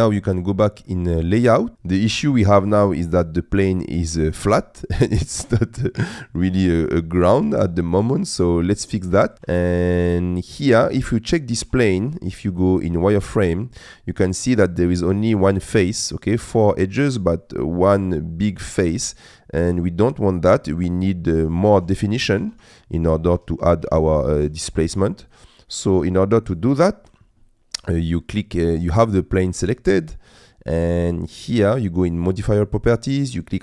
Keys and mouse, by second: 0.6 middle click, 1.7 middle click, 3.5 middle click, 4.7-6.9 middle drag, 8.0 middle click, 9.3 shift+middle click, 10.1 middle click, 10.6 click, 11.6 z, 14.2 middle click, 19.6 z, 21.7 ctrl+z, 22.4 ctrl+z, 23.3 z, 23.8 z, 25.8 click, 26.5 click, 32.5 click.